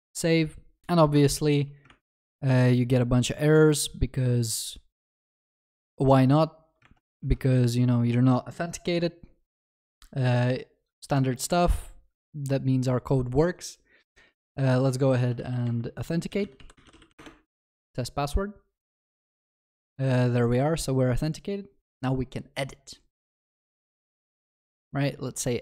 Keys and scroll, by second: 1.9 alt+F12, 6.9 alt+F12.